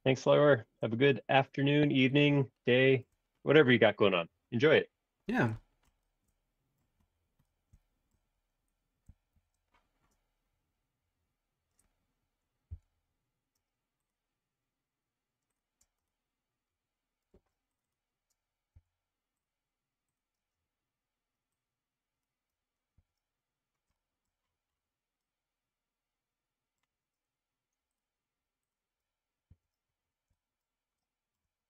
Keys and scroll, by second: 9.3 shift+g, 12.7 l, 15.9 space, 17.3 super+z, 18.7 l, 20.3 space, 22.9 super+1, 29.5 super+1.